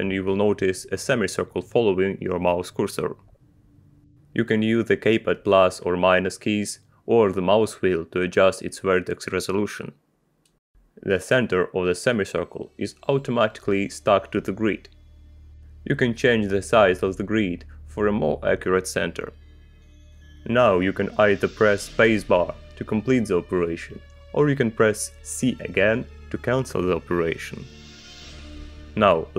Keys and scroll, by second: 6.6 -, 18.4 g, 26.8 space.